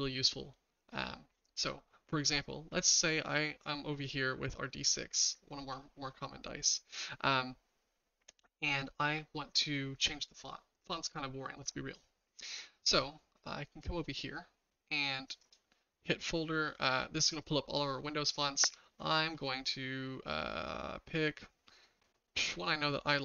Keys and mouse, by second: 4.0 click.